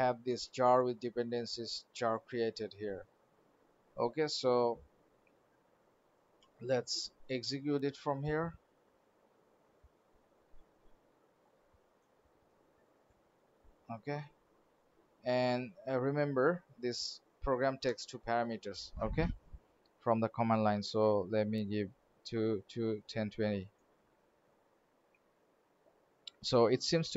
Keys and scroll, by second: 6.2 alt+Tab.